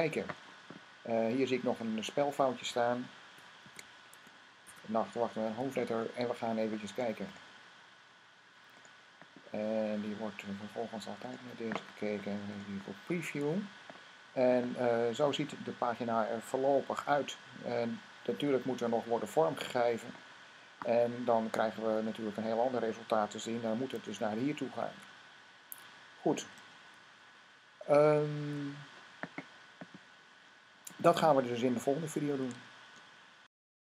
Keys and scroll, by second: 3.4 n, 4.5 s, 23.9 super+`, 24.7 `, 28.2 w.